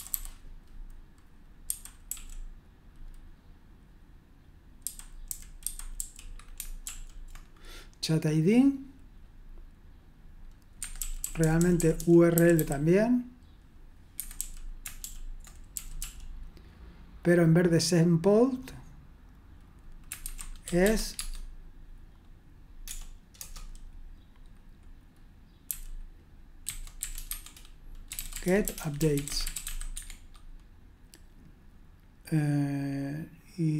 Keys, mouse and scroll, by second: 1.6-2.0 typing, 4.6-6.8 typing, 10.8 Escape, 10.9-12.5 typing, 13.9-16.0 typing, 20.0-21.3 typing, 22.8 BackSpace, 23.3 Return, 25.6-30.1 typing.